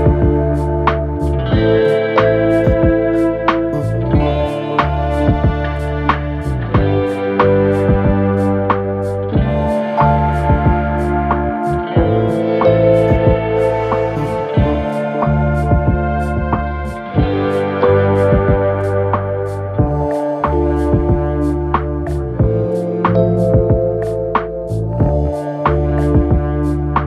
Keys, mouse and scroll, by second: 2.0 space, 5.4 typing, 9.0 ctrl+z, 13.9 right click, 19.0-20.8 scroll down 1, 25.4 space.